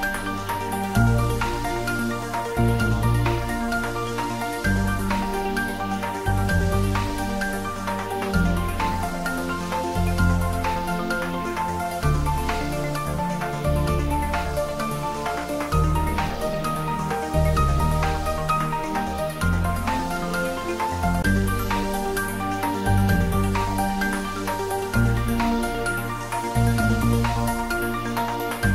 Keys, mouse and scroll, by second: 1.4 click, 3.6-5.6 typing, 4.7 click, 7.6 click, 7.9-9.5 typing, 8.7 click, 10.2 click, 10.8 g, 13.6 x, 15.5 click, 16.1 g, 16.7 z, 18.5 click, 20.2 s, 21.5 click, 22.0 g, 22.4 x, 23.1 click, 23.4-24.3 middle drag, 24.9 click, 25.2-25.8 scroll up 1, 26.6 s, 28.6 click.